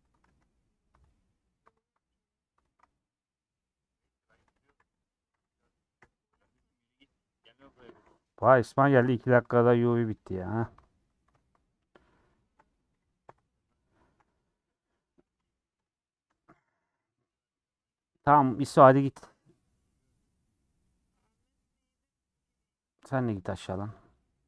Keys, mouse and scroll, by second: 0.0 Tab, 0.3 2, 0.5-2.7 middle drag, 2.7 alt+click, 3.3-4.5 middle drag, 4.5 a, 5.0 u, 6.0 /, 6.3 Tab, 6.6 h, 7.0 click, 7.4-7.9 scroll up 2, 7.9 click, 8.4 /, 8.7 middle click, 9.0 Tab, 9.2 3, 9.6 alt+click, 10.2 alt+click, 10.6 alt+click, 10.9-12.4 middle drag, 12.4 alt+shift+click, 13.7 ;, 14.7 middle click, 15.3 3, 15.8 click, 16.0 middle click, 16.8 shift+click, 17.3-24.4 middle drag.